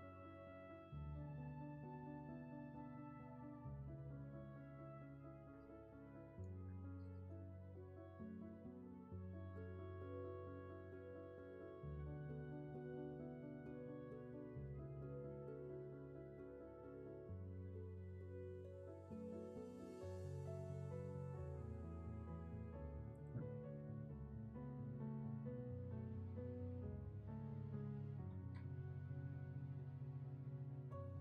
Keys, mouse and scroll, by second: 7.6 ctrl+z, 20.8 ctrl+z, 24.7 ctrl+=, 25.1 ctrl+-, 26.2 scroll up 1, 26.6 scroll down 1.